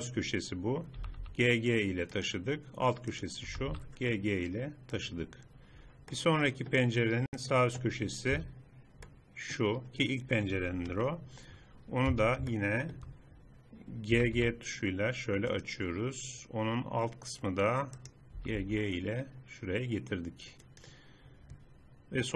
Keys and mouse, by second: 1.1 g, 3.2-4.5 drag, 3.5 g, 8.3 z, 10.9 KP_3, 12.1 z, 14.3 g, 18.0-19.1 drag, 18.5 g.